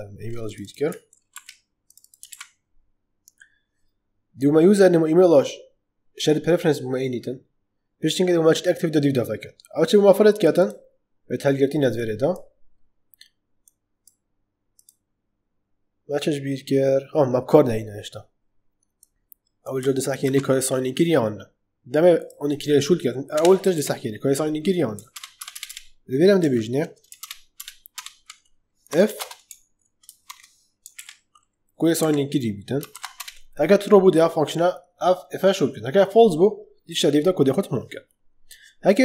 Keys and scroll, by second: 1.2 ctrl+c, 20.2 ctrl+c, 23.2 Return, 23.6 ctrl+v, 25.0 ctrl+BackSpace, 26.3 ctrl+z, 27.1 ctrl+BackSpace, 28.6-30.2 typing, 30.9 ctrl+v, 31.9 Right, 32.8 shift+[, 33.0 Return.